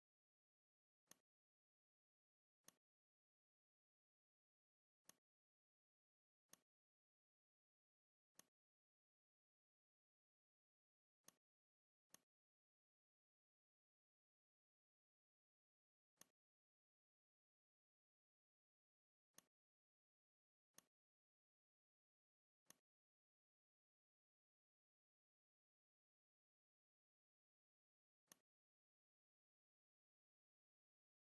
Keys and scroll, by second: 9.7 r, 15.1 v.